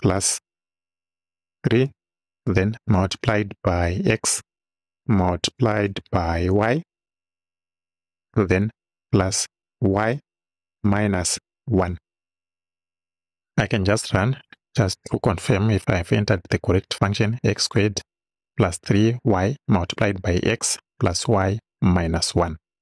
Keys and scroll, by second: 0.4 shift+=, 1.9 3, 2.5 shift+3, 4.4 x, 5.1 shift+x, 5.9 shift+8, 6.6 shift+y, 9.1 shift+=, 10.1 shift+y, 10.8 -.